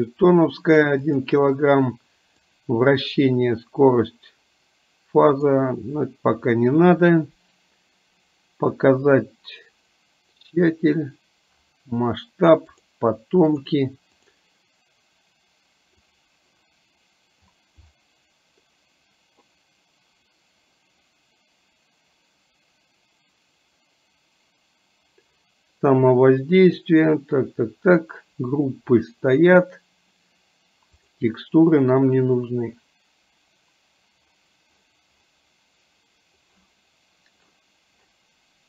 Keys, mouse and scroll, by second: 1.2 click, 2.7 click, 5.4 click, 13.5 click, 14.3 click, 16.0 click, 31.0 click.